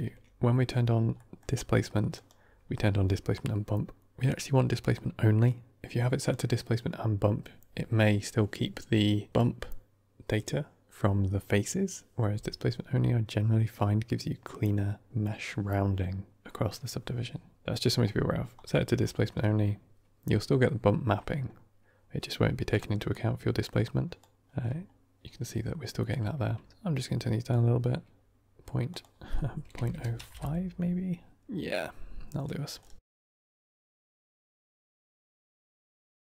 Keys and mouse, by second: 3.0-31.1 drag.